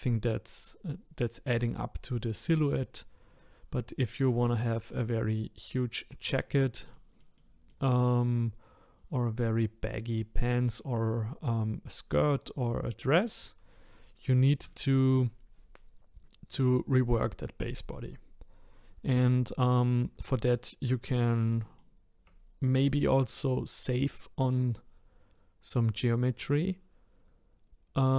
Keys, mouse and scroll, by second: 3.3 click, 6.9-10.4 shift+middle drag, 14.7-17.8 shift+middle drag, 21.5-22.9 shift+middle drag, 22.9-23.5 scroll down 1, 23.9-26.9 scroll up 1.